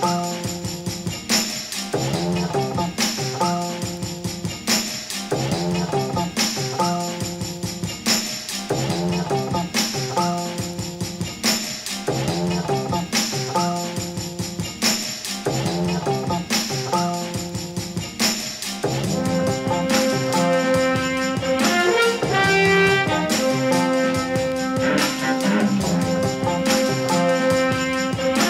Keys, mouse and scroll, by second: 1.8 click, 2.1-2.5 drag, 2.9 alt+a, 5.1-5.6 drag, 6.1 click, 7.1-9.9 drag, 10.3 click, 10.7 l, 10.8 ctrl+z, 11.9 shift+click, 12.3 l, 13.1 ctrl+v, 15.1 Tab, 15.5-17.1 drag, 19.1 click, 23.3 click, 23.6 click, 24.1 alt+a, 28.2-28.4 drag.